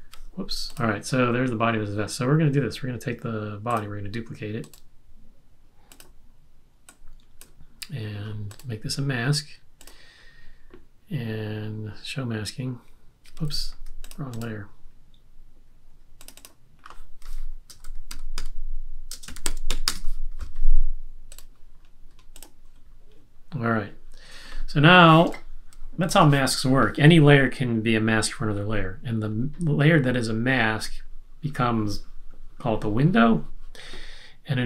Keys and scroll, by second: 13.5 super+z, 17.4-20.1 typing, 25.2 space.